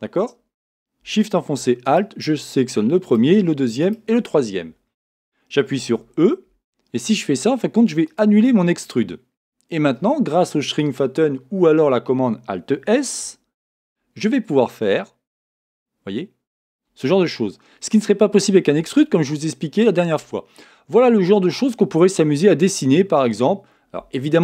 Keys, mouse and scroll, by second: 1.8-5.8 right drag, 5.9 e, 13.6 alt+s, 16.7-18.4 drag, 17.1-18.9 middle drag, 21.5-24.4 middle drag.